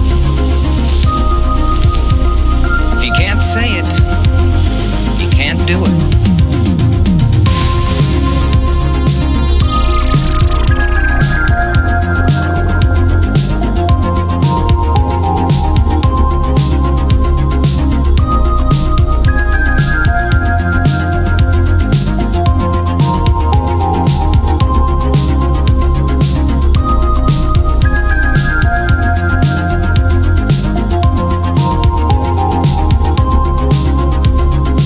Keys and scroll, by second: 7.0 space, 11.8 space, 18.8 space, 28.1 space, 28.6 ctrl+z, 29.2 ctrl+z.